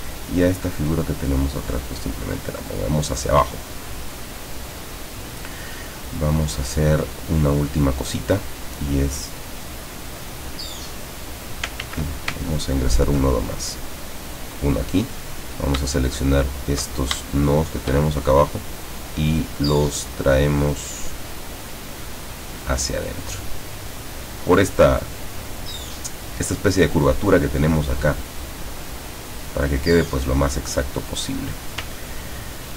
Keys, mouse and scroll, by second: 1.1 click, 5.2 click, 8.3 click, 10.5-11.7 drag, 11.9 ctrl+z, 12.5-13.1 ctrl+scroll up 2, 14.2 click, 15.4 click, 17.3 shift+click, 18.4-20.0 shift+drag, 22.4 click, 27.8-31.9 drag, 32.2-32.6 ctrl+scroll down 2.